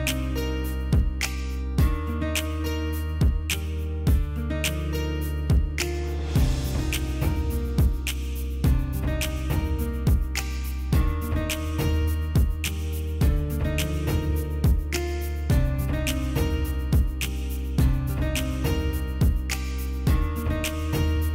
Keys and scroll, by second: 8.3 ctrl+shift+], 18.7 ctrl+space, 20.9 ctrl+space.